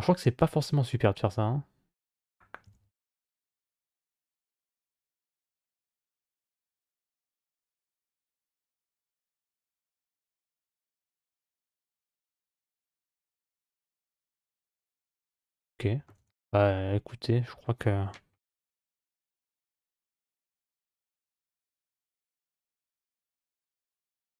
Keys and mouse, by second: 0.2-1.9 middle drag, 2.5 e, 6.6 Tab, 8.4 alt+z, 8.9 alt+z, 12.0 click, 13.6 alt+z, 14.2-15.9 middle drag, 16.0 Tab, 16.4 middle click, 18.1 KP_Divide, 19.7 z, 21.6-22.8 middle drag.